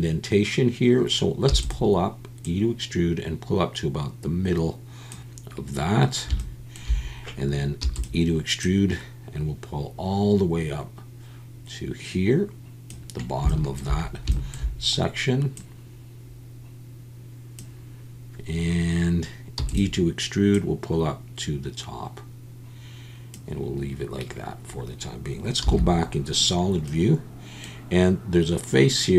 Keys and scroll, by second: 1.5 e, 7.8 e, 19.6 e, 25.6 z.